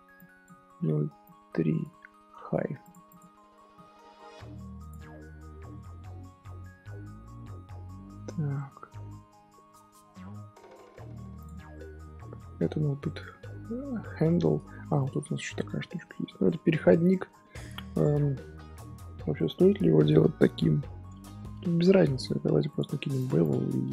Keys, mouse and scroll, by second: 3.0 click, 3.7 middle click, 4.2-4.5 scroll down 1, 5.4-7.2 scroll down 1, 8.4 scroll up 1, 8.5-9.8 middle drag, 9.8 scroll down 2, 10.3-10.8 middle drag, 10.8-11.3 scroll up 2, 11.3 click, 11.7-12.8 shift+middle drag, 12.8 scroll down 2, 13.0-14.6 middle drag, 14.6 scroll up 1, 14.9 click, 15.3 shift+middle drag, 15.5 scroll up 3, 16.0-17.2 middle drag, 17.2-17.8 scroll up 1, 17.8-20.9 middle drag, 22.6 click, 23.1 click.